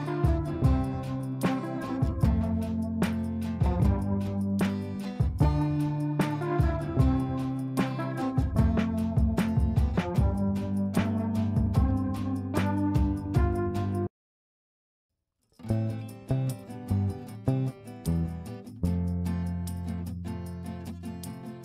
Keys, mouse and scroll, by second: 2.5 space, 2.8-4.1 drag, 6.7 right click, 7.8-14.8 drag, 15.2 F3, 17.4 F2, 17.9-18.9 drag.